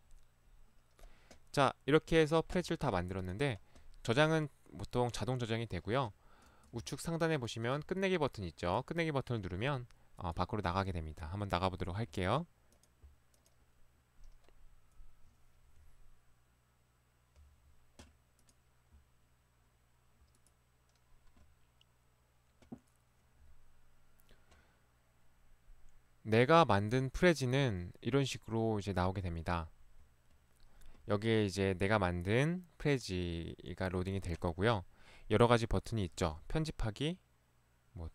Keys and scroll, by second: 7.8 ctrl+1, 9.5 ctrl+Escape, 36.2 ctrl+1.